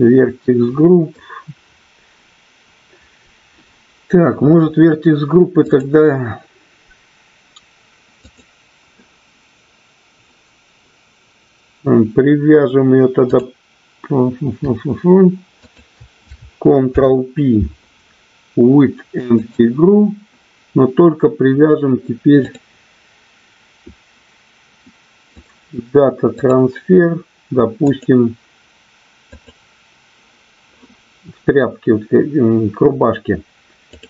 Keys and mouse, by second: 5.6 click, 8.3 click, 15.6 shift+click, 16.9 ctrl+p, 22.5 click, 25.2-26.5 drag, 27.9 click.